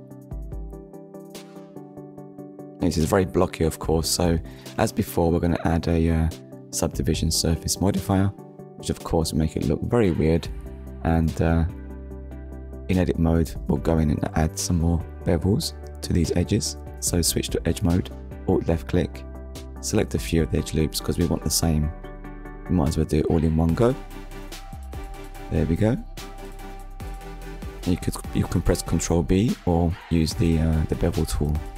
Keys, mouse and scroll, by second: 2.5 scroll down 1, 3.2 shift+middle click, 5.4 click, 7.4 click, 13.3 click, 14.7 Tab, 15.4 middle click, 16.8 click, 18.0 alt+click, 19.6 alt+shift+click, 21.0 middle click, 23.7 alt+shift+click, 24.9 alt+shift+click, 26.0 middle click, 28.3 click, 30.1 click.